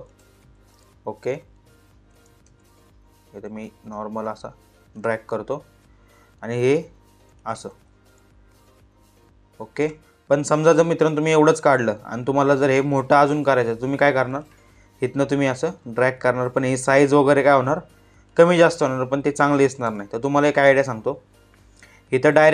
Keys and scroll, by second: 2.0 ctrl+z, 7.2 ctrl+z, 19.3 ctrl+z.